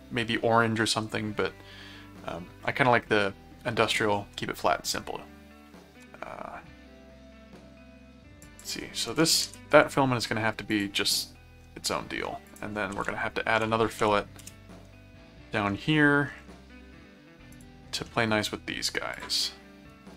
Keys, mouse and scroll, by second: 8.4 click, 10.7 click, 11.9 middle click, 12.5 click, 12.9-14.5 typing, 17.5 click, 18.1 middle click, 19.1 click.